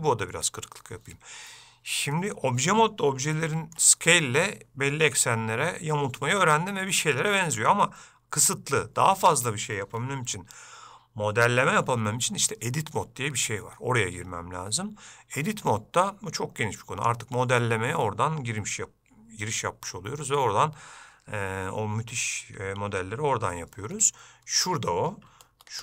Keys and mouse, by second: 3.5 shift+middle click, 8.5-9.5 middle drag, 10.4-11.6 shift+middle drag.